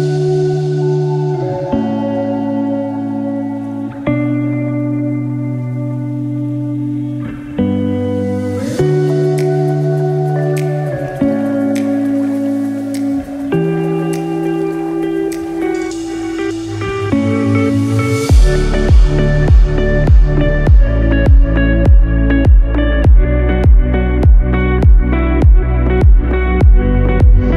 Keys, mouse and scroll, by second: 1.1 scroll down 2, 1.3 middle click, 3.0 Tab, 3.4-3.9 scroll down 2, 3.8 middle click, 6.1 Tab, 6.4 scroll up 2, 7.3 shift+middle click, 7.9 scroll up 2, 8.3 shift+middle click, 11.1 alt+click, 13.3 KP_1, 13.9-14.5 scroll up 4, 15.0 s, 22.5 scroll down 4, 22.9 middle click, 23.8-24.2 scroll down 1, 24.2 shift+middle click, 24.9 scroll up 4, 25.4 middle click, 27.0 KP_1.